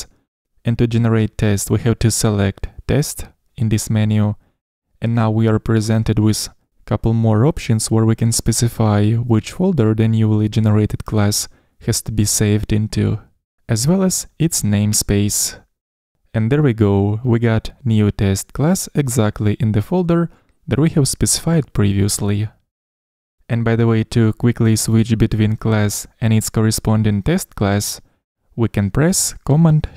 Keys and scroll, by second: 1.8 super+n, 17.1 super+1.